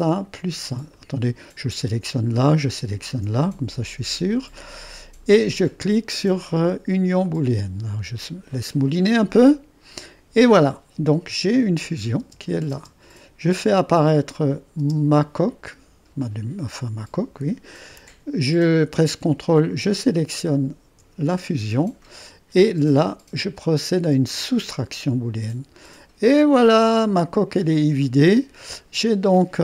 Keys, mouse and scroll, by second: 1.0-2.4 drag, 2.7 click, 7.2-10.4 drag, 11.8 click, 12.2 space, 12.7 space, 14.1 click, 14.8 space, 19.9-21.1 drag, 24.4 click, 25.9 click, 26.5 click, 27.1 click, 27.6 middle click, 28.0-28.7 scroll up 1, 28.7-29.6 middle drag.